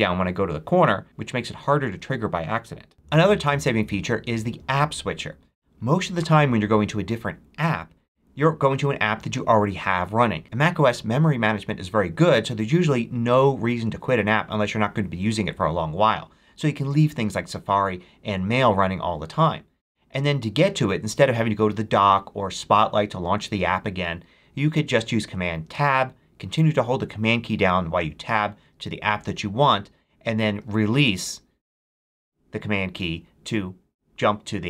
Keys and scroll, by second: 25.6 super+Tab, 28.0 super+Tab, 30.6 super+Tab.